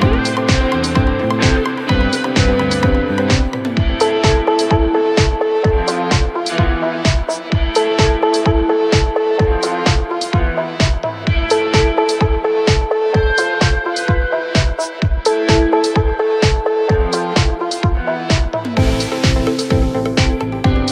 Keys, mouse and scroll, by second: 1.2 click, 1.6-2.2 scroll down 6, 2.2-2.8 middle drag, 2.8 scroll down 1, 3.1-3.9 middle drag, 3.9-4.7 scroll up 3, 4.7 KP_1, 5.1 KP_2, 5.3 KP_2, 5.9-6.6 scroll up 3, 6.6 click, 7.4 click, 7.7 scroll down 3, 8.0-8.6 middle drag, 8.6 right click, 9.8 KP_Divide, 11.1 click, 11.3-12.2 scroll down 2, 12.2 click, 12.5 scroll up 2, 12.8-13.4 middle drag, 13.4 scroll down 1, 13.6-15.1 middle drag, 15.1 Tab, 15.8-17.6 middle drag, 17.6 ctrl+r.